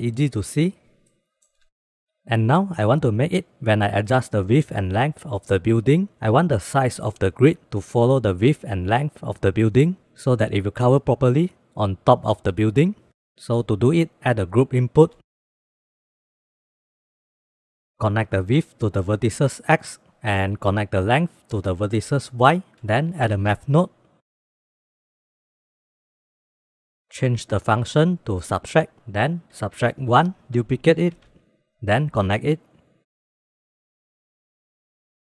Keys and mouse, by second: 0.4-1.6 drag, 2.7 click, 3.1 click, 4.6 click, 4.8 click, 5.0 click, 5.2 click, 5.3 click, 6.1 click, 6.4 click, 7.7-8.8 drag, 9.9 click, 10.0 click, 10.2 click, 10.3 click, 10.5 click, 11.0 click, 12.1-12.5 shift+middle drag, 13.5 click, 14.0 click, 14.6 shift+a, 18.0-19.3 drag, 20.2-22.2 drag, 23.2 shift+a, 27.4 click, 29.1-30.1 drag, 30.9 shift+d, 32.0-32.5 drag, 33.1-34.4 drag, 34.7 middle drag.